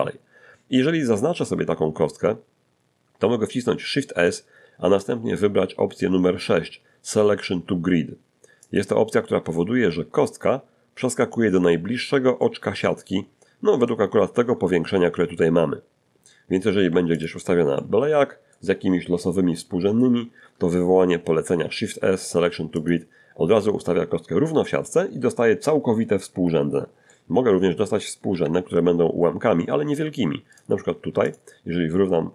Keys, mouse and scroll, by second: 1.2 Escape, 4.0 shift+s, 8.6 click, 12.4-14.0 middle drag, 15.3-15.9 scroll down 1, 16.8 g, 17.2 click, 17.8 middle click, 21.5 shift+s, 22.8 click, 27.1 middle click, 28.3 1, 29.4-30.1 scroll up 4, 30.6 right click, 31.0 g, 31.3 click.